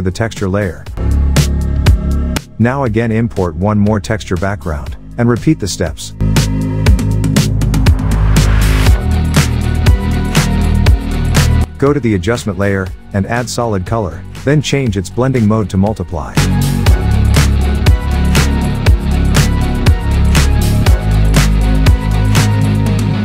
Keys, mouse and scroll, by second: 1.1 alt+Tab, 1.7-2.8 click, 2.3 alt+Tab, 3.6-4.6 drag, 6.5 ctrl+shift+i, 7.7 click, 11.9-15.3 drag, 18.9-21.4 drag.